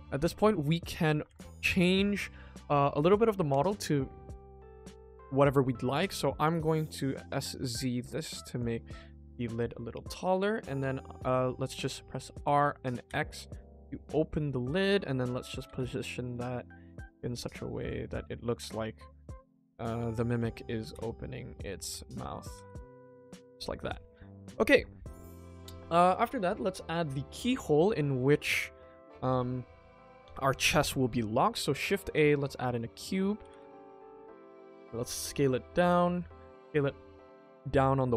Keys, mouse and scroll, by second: 0.2 KP_1, 0.9 shift+middle click, 1.3 ctrl+s, 2.1 click, 6.3 click, 6.7 5, 8.5 click, 8.7 middle click, 9.5 KP_1, 10.2 click, 10.5 KP_1, 10.7 KP_3, 12.3 r, 18.0 click, 18.3 middle click, 19.5 click, 19.7 KP_3, 19.7 KP_2, 20.3 KP_3, 21.7 g, 23.2 click, 23.5-23.9 middle drag, 24.6 middle drag, 27.2 middle drag, 27.9 shift+middle click, 28.3 ctrl+s, 33.1 middle drag, 33.4 g, 34.1 s.